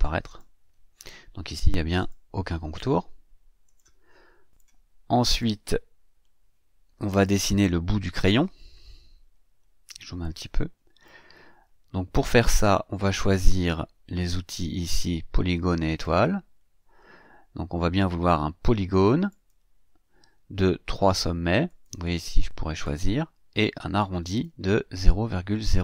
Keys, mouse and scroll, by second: 0.3 click, 2.0 click, 3.6 click, 4.5 click, 5.4-7.4 drag, 9.1-10.0 ctrl+scroll up 4, 10.2-11.2 ctrl+drag, 16.0 click, 19.3 click, 21.6 click, 22.8 click, 24.0 click.